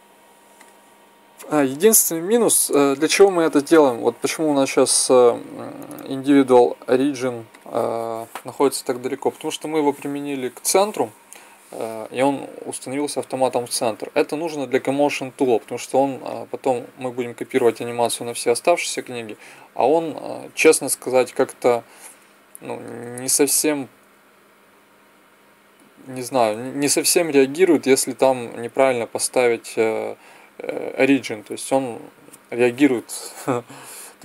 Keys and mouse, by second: 0.5-1.6 drag, 2.1 click, 5.7-7.7 drag.